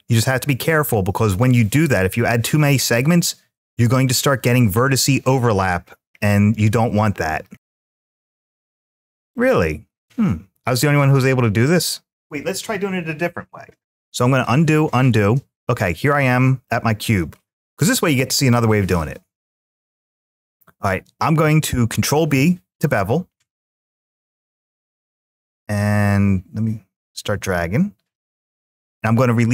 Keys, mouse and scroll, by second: 1.4-3.6 scroll up 5, 3.8-5.0 scroll up 1, 5.2-5.9 scroll down 2, 6.9-7.2 scroll down 2, 7.7 scroll down 1, 7.7-8.2 scroll up 1, 8.2 click, 8.8 click, 9.1-12.1 middle drag, 14.0 ctrl+z, 14.5 ctrl+z, 16.5-17.6 middle drag, 21.9 ctrl+b.